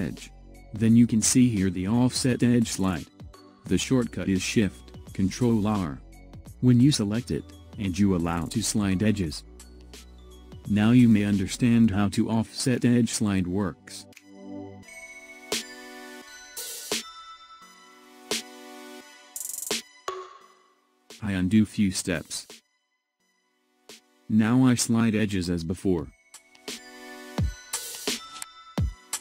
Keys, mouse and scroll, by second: 1.0-4.0 drag, 19.1 click, 19.6-20.6 scroll up 1, 20.6-22.1 scroll up 1, 22.1 ctrl+z, 23.0 ctrl+z, 27.5-29.2 drag.